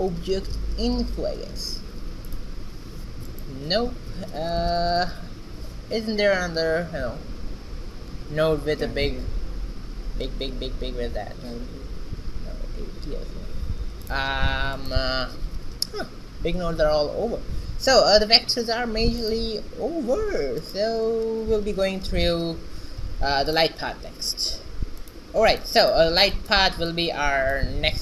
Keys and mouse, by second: 2.4 shift+a, 13.7 shift+a, 19.5 shift+a, 20.7 shift+a, 24.1-25.5 drag, 26.9-28.0 drag.